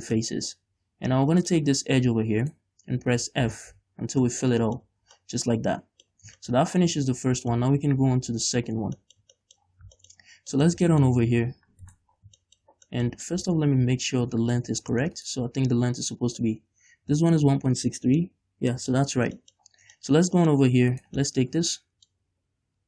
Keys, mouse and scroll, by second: 1.6 click, 2.6 right click, 3.3 f, 4.2 scroll down 2, 4.4 Tab, 4.6 middle click, 5.0 a, 5.3 middle click, 6.5 shift+middle click, 6.9-7.6 scroll down 1, 7.7 middle click, 9.3 shift+middle click, 9.8-10.7 scroll up 4, 10.1 shift+middle click, 10.7-12.0 middle drag, 12.0 right click, 12.3 scroll down 2, 12.6-14.6 shift+middle drag, 13.7 Tab, 14.6 right click, 14.8 Tab, 15.3 right click, 16.6 middle click, 19.1 Tab, 19.3 scroll down 1, 19.5 shift+middle click, 19.7 scroll up 1, 20.1 shift+middle click, 20.5 middle click, 21.2 right click, 21.5-22.8 middle drag, 21.7 Tab.